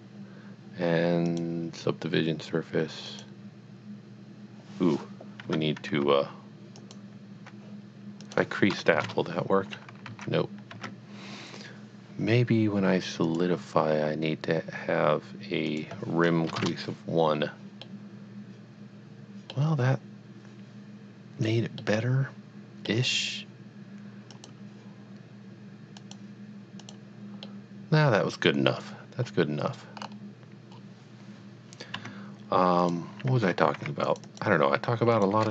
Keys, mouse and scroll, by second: 1.3 click, 3.1 click, 5.5 Tab, 6.8 alt+click, 8.9 KP_1, 9.0 KP_Enter, 10.5 z, 12.5 Tab, 13.2 click, 15.7 click, 16.5 KP_1, 16.6 KP_Enter, 17.9 middle click, 18.2 middle click, 19.1 middle click, 21.8 middle click, 24.3 click, 26.1 click, 26.8 click, 27.5 middle click, 30.0-30.3 scroll up 1, 30.9-31.2 scroll down 1, 32.0 Tab, 32.9 click, 34.0 r, 34.1 click, 34.4 double click, 35.1 click.